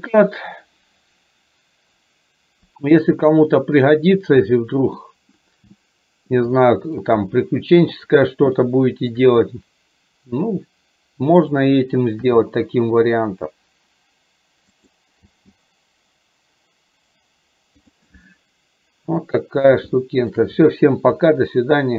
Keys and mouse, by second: 5.8 middle click, 6.6 shift+middle click, 8.7 shift+middle click, 11.5 click, 12.4 g, 19.3 middle click, 20.0 shift+middle click.